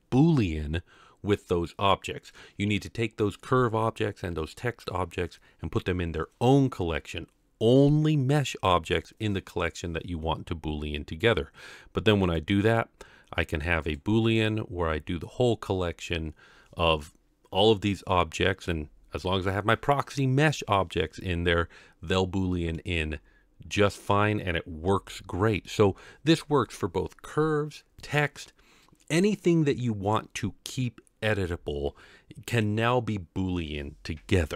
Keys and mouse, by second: 12.3 click, 13.8 click, 22.2-22.7 middle drag, 23.7-24.1 middle drag, 25.1-25.6 shift+middle drag.